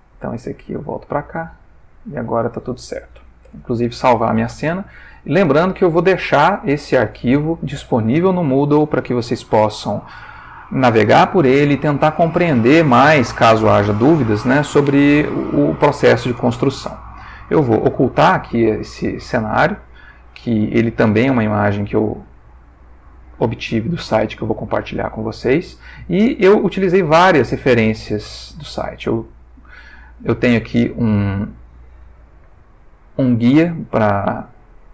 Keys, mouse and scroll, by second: 0.2 click, 3.4 ctrl+s, 5.2 ctrl+middle click, 6.2-7.3 ctrl+shift+middle drag, 17.8 click, 19.8 click, 20.7 click, 22.6 ctrl+middle click, 23.9-25.1 middle drag, 26.3 click, 27.0 click, 27.9 click, 30.0-33.8 shift+middle drag, 34.1 shift+middle click.